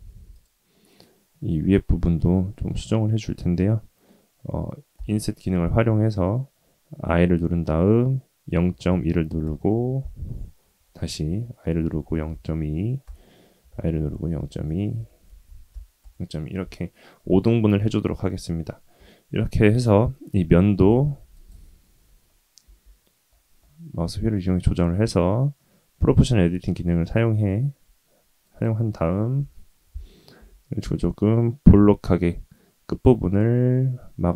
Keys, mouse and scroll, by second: 0.0 3, 0.3 click, 0.7-1.7 middle drag, 2.2 shift+middle click, 3.5 middle click, 4.9 i, 10.2-11.2 scroll up 1, 11.2 i, 13.6 i, 14.9 i, 17.1-18.2 middle drag, 18.4-18.9 scroll up 3, 19.0 shift+middle click, 20.3 g, 22.0 scroll up 1, 22.1 scroll down 2, 22.3-22.6 scroll up 1, 22.6 g, 29.4 KP_3, 30.3 g.